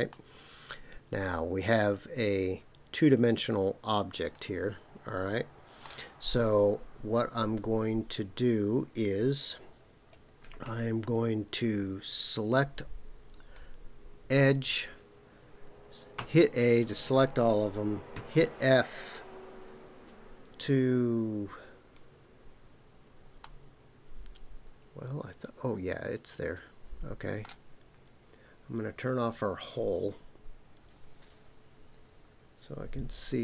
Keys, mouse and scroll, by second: 0.1-5.8 middle drag, 14.5 click, 16.1 a, 18.1 f, 23.4-27.4 middle drag, 30.8 KP_Decimal, 33.2 click.